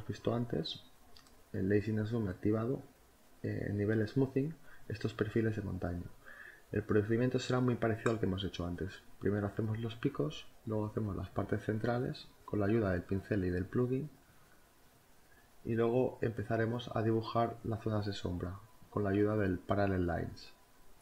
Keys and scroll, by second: 0.5 ctrl+z, 2.0 ctrl+z, 4.1 4, 4.7 6, 13.0 ctrl+z, 15.5 ctrl+z, 16.4 ctrl+z, 16.9-17.9 typing, 20.2 space, 20.6 ctrl+z.